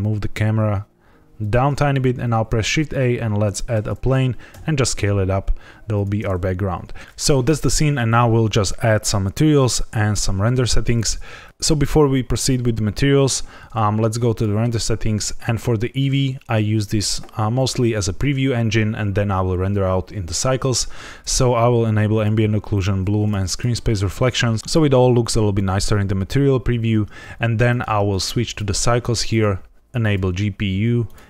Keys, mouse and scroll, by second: 1.3 shift+click, 1.7-2.1 scroll down 2, 2.2 shift+a, 4.4 s, 5.9 click, 7.0 shift+middle click, 14.3 click, 22.1 click, 22.7 click, 23.4 click, 27.6 click, 29.2 click, 31.0 click.